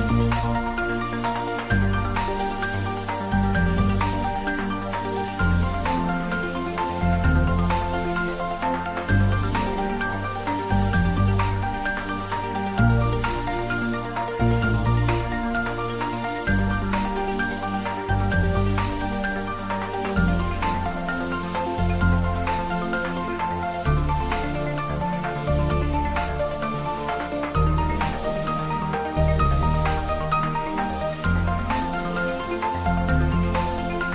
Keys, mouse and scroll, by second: 0.2 click, 0.3 Tab, 1.0 middle click, 1.3 Tab, 2.0 ctrl+r, 2.2 click, 4.0 Tab, 4.2 right click, 4.7 click, 5.0 middle click, 5.6 Tab, 6.2 ctrl+r, 6.6 click, 7.5 Tab, 7.8 middle click, 8.6 click, 8.8 Tab, 9.5 ctrl+r, 9.9 click, 11.2 Tab, 12.1 ctrl+r, 12.3 click, 13.5 Tab, 13.7 middle click, 13.8 middle click, 14.6 Tab, 14.9 click, 15.5 2, 15.7 click, 16.7 3, 16.9 click, 17.6 i, 17.9 click, 18.0 Tab, 18.3-19.6 middle drag, 19.6 ctrl+s, 19.8 middle click, 21.4 click, 21.7 ctrl+middle click, 22.2 ctrl+s, 23.6 shift+right click, 26.8 shift+Num_Lock, 26.8 shift+right click, 26.9 shift+a, 28.4 click, 33.2 click.